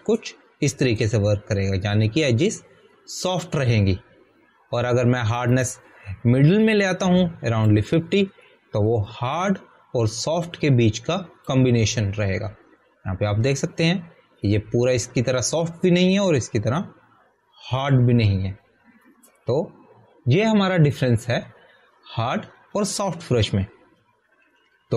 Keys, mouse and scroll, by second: 7.5 click, 14.2 alt+scroll up 1, 19.8 alt+scroll, 20.1 alt+scroll down 1.